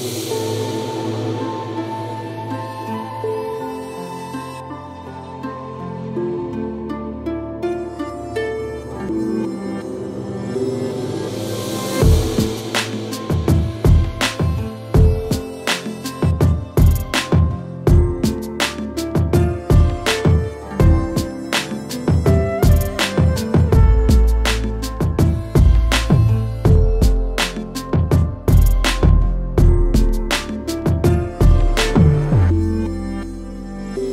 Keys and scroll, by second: 0.1 Return, 1.4 Right, 2.2 Right, 2.3 Right, 2.4 Right, 2.5 Right, 3.0-4.1 typing, 4.6 Return, 7.3 b, 7.7 g, 7.8 Return, 28.5 ctrl+z, 29.4 ctrl+alt+z, 30.8 x.